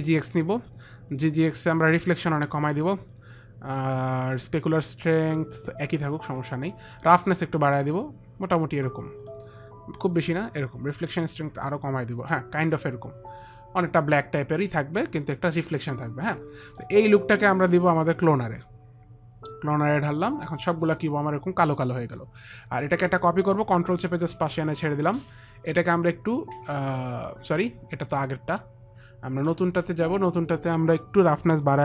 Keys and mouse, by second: 2.6 click, 4.9 click, 6.5 click, 7.9 click, 10.6 click, 11.5 click, 13.7 click, 17.0 click, 18.4 click, 24.1 ctrl+click, 25.6 ctrl+click, 28.4 click, 29.9 click.